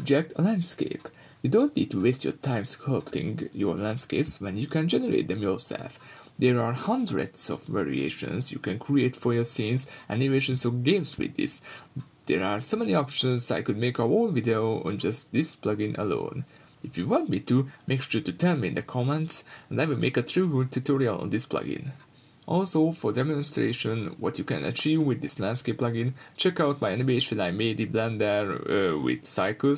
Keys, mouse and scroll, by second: 0.0-1.1 drag, 1.1 middle drag, 1.3-1.6 scroll up 2, 1.6-3.3 middle drag, 1.6 scroll down 2, 3.3-4.6 drag, 4.6-6.3 middle drag, 6.3-7.8 drag, 7.7 scroll down 2, 7.8-13.3 middle drag, 8.0 scroll up 2, 9.0 scroll down 2, 9.4-10.0 scroll up 2, 10.0 scroll down 2, 13.3 click, 14.8 click, 15.5-17.8 middle drag, 15.5 scroll down 2, 16.6-17.8 scroll up 2, 17.8 click, 18.7 click, 19.3-19.7 middle drag, 19.7 scroll up 2, 20.0 middle click, 20.6-25.3 drag, 22.1 Return, 24.8 Return, 25.3-27.3 middle drag, 25.8 scroll down 2, 26.1-26.9 scroll up 2, 26.9-27.3 scroll down 2, 27.3-29.7 drag.